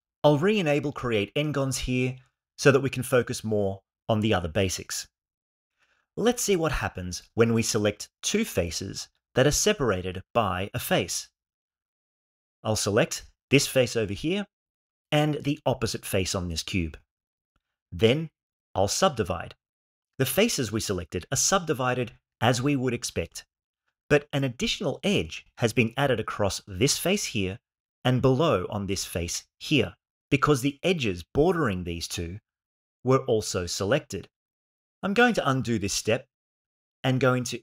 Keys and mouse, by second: 12.6 click, 14.2-15.9 shift+middle drag, 17.2 shift+click, 19.0 ctrl+e, 35.6 ctrl+z.